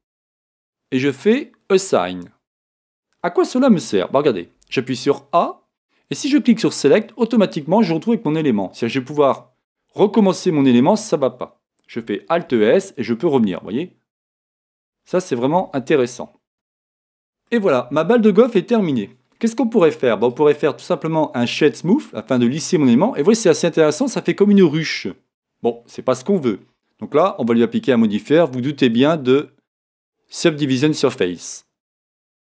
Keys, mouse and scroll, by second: 1.8 e, 4.6-5.7 middle drag, 4.6 a, 6.9 middle click, 6.9 click, 7.6-22.1 middle drag, 12.6 alt+s, 16.3 scroll up 2, 22.1 right click, 22.8-32.4 middle drag.